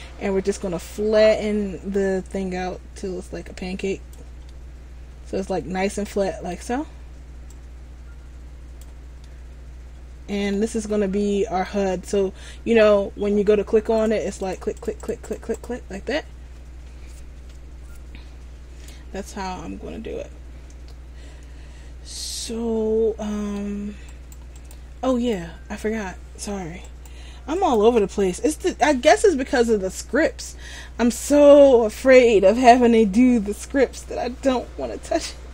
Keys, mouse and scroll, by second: 4.6 middle click, 7.6 click, 9.3 middle click, 10.8-11.1 scroll up 2, 11.3 middle click, 14.1-19.0 click, 19.7 scroll down 2, 20.2-21.4 scroll up 1, 22.2 middle click, 22.2 scroll up 3, 24.2 right click, 27.0 shift+right click, 27.7 shift+right click.